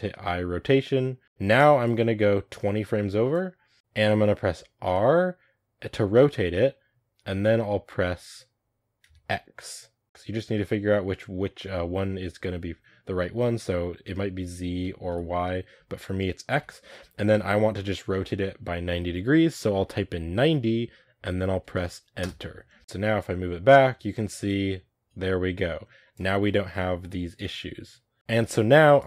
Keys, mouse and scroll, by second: 1.2 r, 1.7-3.7 drag, 3.7-4.8 middle drag, 4.8 r, 10.0 r, 22.8 middle click, 23.1-26.1 drag, 26.3 middle click, 27.2-29.0 drag.